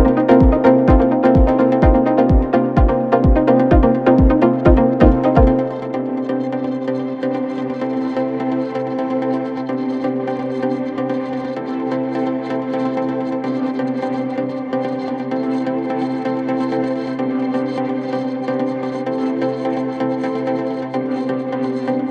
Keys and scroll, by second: 0.0 4, 1.7 m, 1.8 e, 2.0 a, 2.1 l, 2.2 Return, 6.6 3, 7.1 ].